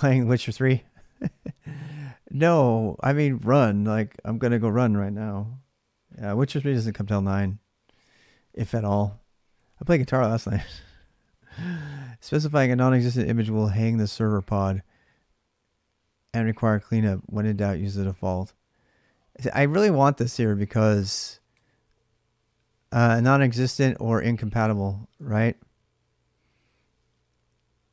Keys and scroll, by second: 25.0 alt+Tab.